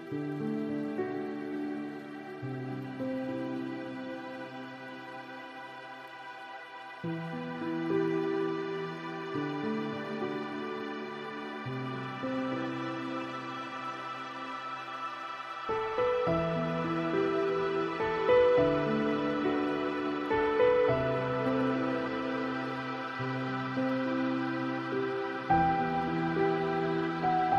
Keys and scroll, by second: 12.7 ctrl+z.